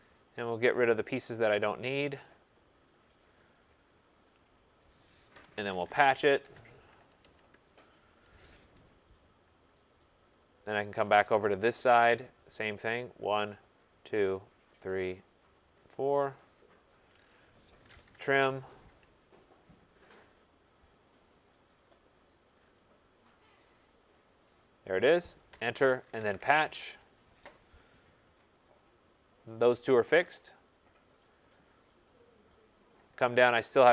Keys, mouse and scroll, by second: 0.9 click, 1.9 click, 3.0 click, 3.6 click, 4.5 click, 5.3 Return, 5.4-6.6 typing, 8.8 scroll, 8.8 Return, 9.7 right click, 9.9-10.5 scroll, 11.9 click, 13.0 click, 13.2 click, 13.2 middle click, 13.8 click, 14.7 click, 15.8 click, 17.0 click, 17.5-18.6 typing, 20.1 click, 20.9 click, 21.7 click, 21.8-22.6 typing, 22.7 click, 23.6 click, 24.1 click, 25.4 Return, 25.8-27.0 typing, 28.7 click, 29.7-31.4 scroll, 31.7 scroll, 32.3 scroll, 32.5 scroll down 10, 33.7-33.9 scroll.